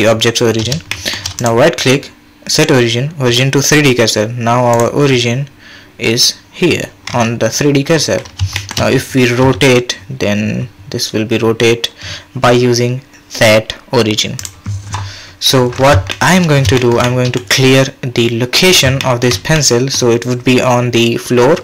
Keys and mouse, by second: 0.9 shift+drag, 1.4-4.8 right drag, 8.5 shift+drag, 9.4 r, 16.1 shift+drag, 17.1 middle drag, 19.0 shift+click, 19.6-19.9 middle drag.